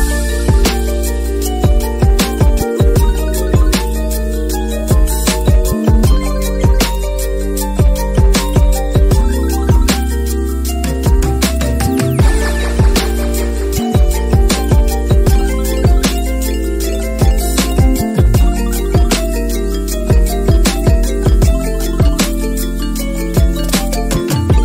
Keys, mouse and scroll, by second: 0.5 click, 0.7 click, 0.8 click, 1.1 click, 1.8 click, 2.5 middle click, 3.0 right click, 3.8 click, 4.0 click, 4.2 click, 4.3 click, 4.5 right click, 5.2 middle click, 5.7 middle click, 6.9-9.0 drag, 9.0 middle click, 9.2 click, 9.5 click, 9.8 middle click, 11.0 middle click, 11.2 click, 11.4 middle click, 12.3 click, 12.6 shift+middle click, 12.8 click, 13.2 click, 13.4 middle click, 13.7 click, 14.0 middle click, 14.2 click, 14.6 middle click, 14.8 click, 15.0 middle click, 17.1 middle click, 17.8 middle click, 18.2 click, 18.4 middle click, 18.9 click, 19.4 right click, 20.0 click, 20.4 middle click, 21.1 middle click, 21.7-24.0 drag, 24.0 Tab, 24.2 click, 24.4 click.